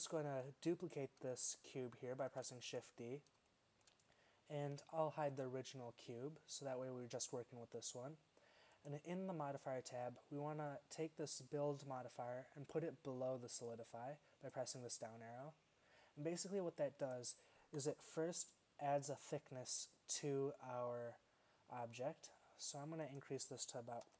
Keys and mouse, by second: 0.5 middle click, 2.3 shift+d, 17.9 z, 23.1-24.1 drag.